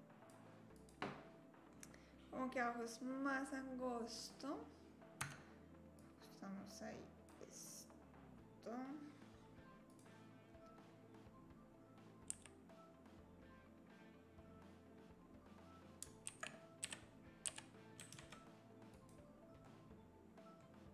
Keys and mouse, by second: 0.8 click, 1.4 middle click, 4.2 click, 5.2 Tab, 6.1-7.3 drag, 9.9-12.3 drag, 12.3 s, 16.3 shift+d, 19.6-20.6 drag.